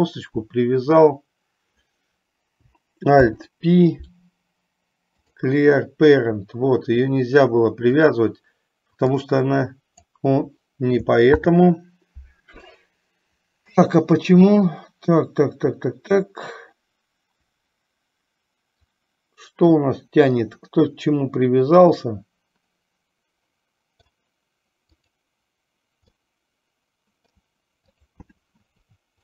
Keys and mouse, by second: 3.3 alt+p, 8.0 click, 9.6 click, 11.5 ctrl+z, 20.7-24.2 middle drag, 25.2 click, 26.4-27.7 middle drag.